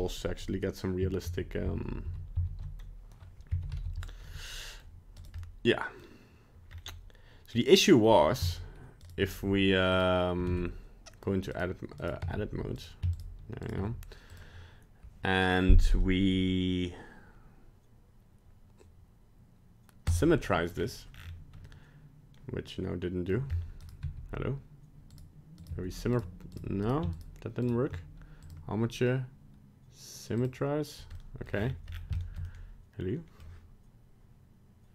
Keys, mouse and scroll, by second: 1.3 ctrl+z, 1.7 ctrl+z, 2.1 ctrl+z, 2.4 ctrl+z, 3.6 alt+r, 3.7 alt+g, 4.3 middle click, 4.8 middle click, 5.2 right click, 5.4 middle click, 5.4 middle click, 6.7 scroll up 2, 7.6 scroll down 1, 8.1 scroll down 1, 8.5 shift+right click, 9.0 shift+right click, 9.9 click, 10.5 ctrl+Tab, 11.5 right click, 12.0 right click, 12.3 Tab, 12.8 right click, 13.1 shift+right click, 13.7 shift+right click, 14.3 click, 20.8-21.1 scroll up 4, 21.1 scroll down 7, 21.7 middle click, 23.5 scroll up 2, 23.8 right click, 24.0 g, 25.6 right click, 25.7 g, 26.5 right click, 26.8 right click, 27.1 shift+right click, 27.8 right click, 28.4 click, 31.2 middle click, 31.5-32.1 scroll down 11, 32.2 shift+middle click, 32.4 shift+middle click, 32.5 middle click.